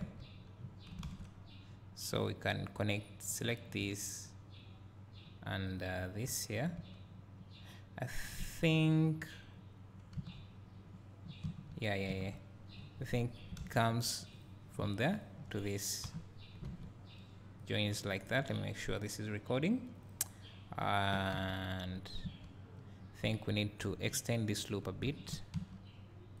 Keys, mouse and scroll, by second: 1.1 alt+a, 1.4-3.4 scroll up 1, 3.4 click, 5.8 shift+click, 8.5-10.3 scroll down 2, 12.9-13.6 scroll up 2, 13.6 alt+a, 14.4-16.2 drag, 16.2 j, 16.7 alt+a, 17.6-20.6 drag, 20.5-21.3 scroll down 2, 21.3 scroll down 1, 21.5-23.9 drag, 24.6-26.4 ctrl+drag.